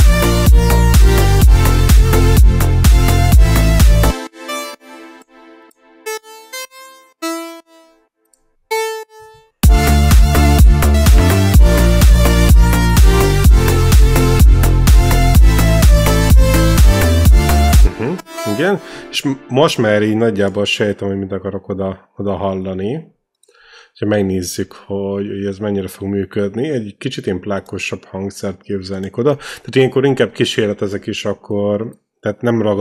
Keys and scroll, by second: 3.9 space, 9.4 space, 17.6 space, 18.0 e.